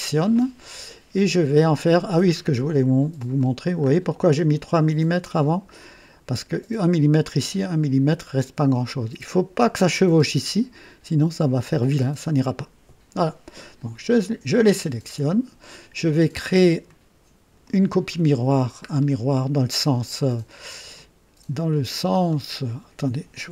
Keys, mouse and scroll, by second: 0.3-1.8 drag, 2.2-2.5 scroll up 1, 3.1 click, 3.7 scroll up 1, 4.1 right click, 13.6 click, 14.7 ctrl+click, 16.8 click, 17.9 right click, 18.8-19.3 scroll down 3, 20.1 click, 22.2-22.5 scroll down 2.